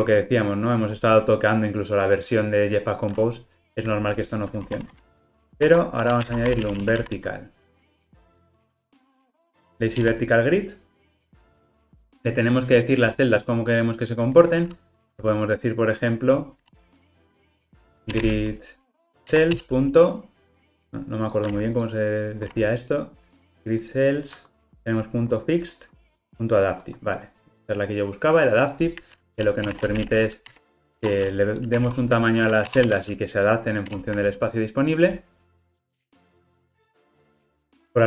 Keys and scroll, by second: 4.7 Tab, 10.1 Return, 19.3 Return, 21.7 super+b.